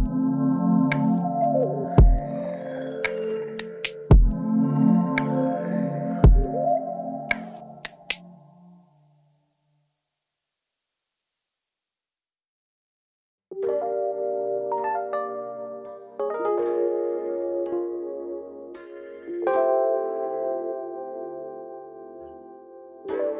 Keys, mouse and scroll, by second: 0.3 middle click, 0.9 click, 1.0 middle click, 1.4 shift+click, 1.8 middle click, 2.2 click, 2.6 middle click, 3.3 click, 3.9 middle click, 4.1-5.3 scroll up 4, 4.9 middle click, 5.3 middle click, 5.7 shift+click, 7.4 middle click, 7.7 scroll down 1, 8.1 click, 9.1-11.7 middle drag, 9.3 scroll down 1, 9.7-10.1 scroll up 1, 11.7 click, 13.6 middle click, 13.9 click, 14.7 middle click, 15.2 click, 16.1 middle click, 16.8 middle click, 17.2-18.6 shift+drag, 18.6 middle click, 19.0 click, 19.8 middle click, 20.8 shift+click, 21.2 f, 21.3 middle click, 21.8 click, 22.6 middle click.